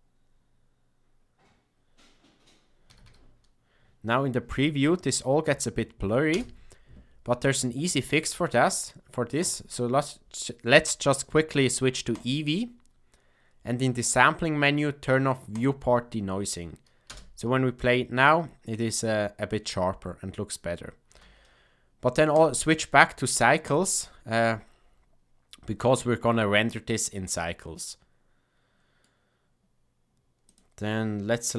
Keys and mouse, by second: 3.0 a, 3.1 a, 6.4 space, 9.3-12.2 drag, 15.5 click, 17.0 space, 21.3 space, 22.3-23.7 drag, 26.2-29.0 middle drag, 30.5 click.